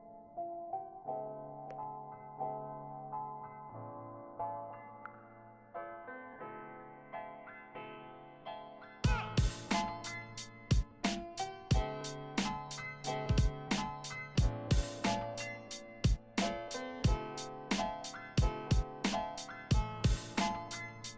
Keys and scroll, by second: 0.4 Left, 0.5 BackSpace, 0.9 BackSpace.